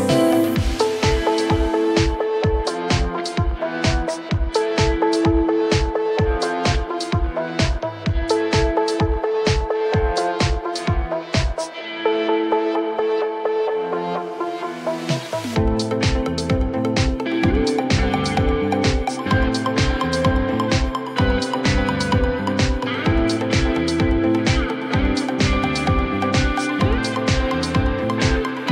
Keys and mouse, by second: 1.5 alt+middle drag, 2.7 alt+click, 5.3 click, 6.2 alt+drag, 7.1 alt+click, 7.8 alt+middle drag, 10.7 alt+x, 20.0 click, 23.8 click, 25.9-28.7 drag.